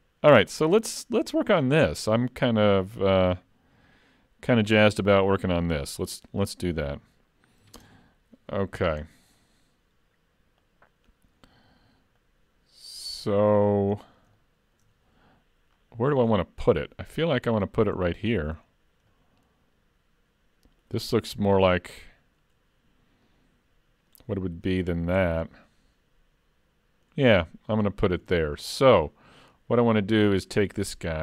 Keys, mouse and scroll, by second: 7.8 ctrl+space, 9.0 scroll down 4, 10.6 click, 12.2 click, 13.3-14.0 scroll down 3, 14.0 scroll up 1, 14.4 shift+middle click, 15.8-16.1 scroll down 3, 16.8 middle click, 17.5 click, 18.1 shift+middle click, 19.1 middle click, 21.3-22.1 scroll up 4, 23.3 middle click, 25.5 middle click, 27.5-27.8 scroll down 2, 27.8 middle click, 28.3 shift+middle click.